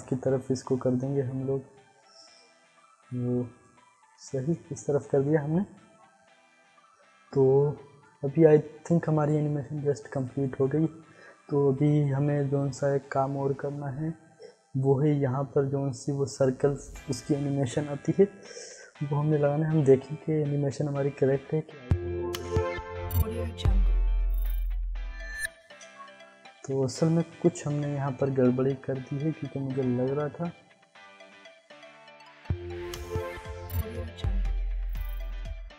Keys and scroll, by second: 0.1 ctrl+z, 21.7 Insert, 25.6 space, 32.2 space, 35.5 space.